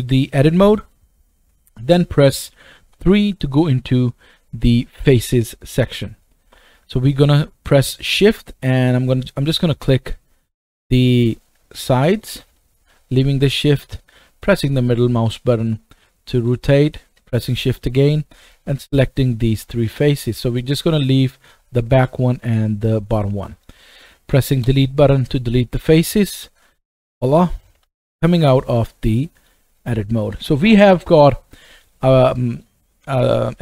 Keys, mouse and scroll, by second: 3.0 3, 3.8 click, 6.2 middle click, 6.4-7.3 right drag, 9.8 shift+click, 10.7 shift+click, 11.2 shift+middle click, 12.5 middle click, 17.6 shift+click, 18.4 shift+click, 18.9 middle click, 20.4-23.2 middle drag, 24.0 right click, 24.5 Delete, 26.6 click, 27.8 Tab, 28.5 scroll down 1, 29.4-31.0 shift+middle drag, 32.6 middle click.